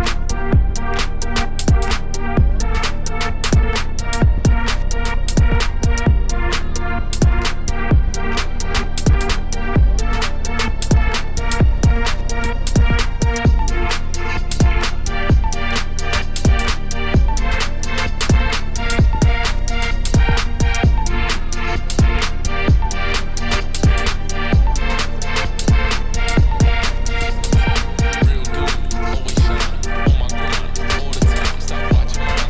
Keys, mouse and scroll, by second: 0.3-1.5 drag, 2.0-3.1 shift+drag, 3.1 middle click, 3.8 scroll up 2, 4.0-4.5 scroll down 3, 4.3 middle click, 4.7 shift+click, 5.1 click, 5.8 click, 6.8 click, 7.3 click, 7.6 shift+click, 8.1 ctrl+l, 8.6-9.0 scroll up 2, 8.7 middle click, 9.1 middle click, 9.5 Tab, 10.1 ctrl+r, 11.3 ctrl+r, 12.1 g, 12.8 Tab, 13.2 ctrl+s, 13.5 click, 13.6 right click, 14.3 scroll down 7, 14.6-15.8 middle drag, 15.8 click, 16.1 middle click, 16.8-17.1 scroll up 3, 17.1 Tab, 17.3 2, 17.4 middle click, 17.7 3, 17.9 click, 18.3 x, 19.0 click, 19.3 f, 19.9 middle click, 20.2 Tab, 20.5 Tab, 20.7 ctrl+r, 22.6 middle click, 22.8 ctrl+r, 23.8 middle click, 24.2 ctrl+z, 24.3 ctrl+z, 24.8 middle click, 25.1 Tab, 25.4 3, 25.5 click, 25.6 x, 26.0 click, 26.1 f, 26.2 f, 26.5 middle click, 28.8-30.1 drag, 30.3 right click, 30.7-32.4 drag.